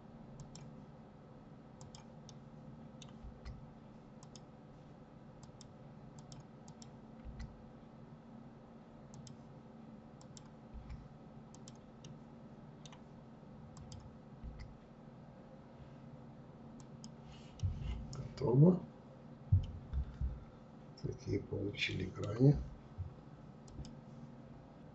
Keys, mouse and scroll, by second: 0.8 click, 1.2-2.2 middle drag, 2.2 Delete, 3.2 click, 4.4 click, 5.1 click, 9.2 click, 11.0-12.7 middle drag, 12.7 click, 16.5-19.6 middle drag.